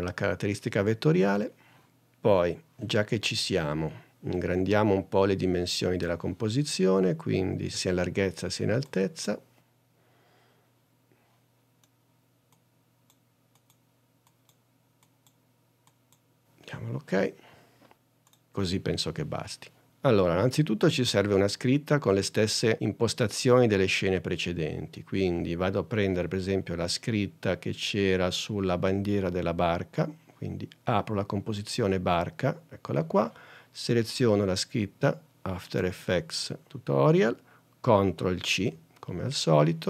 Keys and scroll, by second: 38.6 super+c.